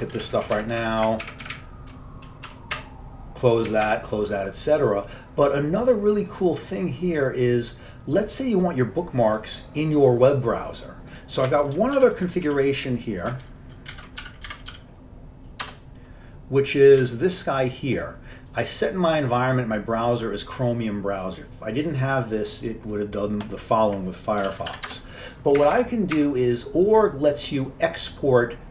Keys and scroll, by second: 0.3 Left, 0.5 Right, 0.6 Down, 0.8 Right, 1.1 Up, 1.3 Right, 1.5 Down, 1.6 Right, 2.6 Home, 2.9 Tab, 3.7-4.5 typing, 12.1 ctrl+x, 12.6 v, 13.6 ctrl+g, 14.0 ctrl+x, 14.1-15.3 typing, 15.8 Return, 17.1 Page_Up, 24.6 ctrl+x, 24.8 b, 25.0 Return, 25.7 Up, 25.9 Up, 26.3 Up.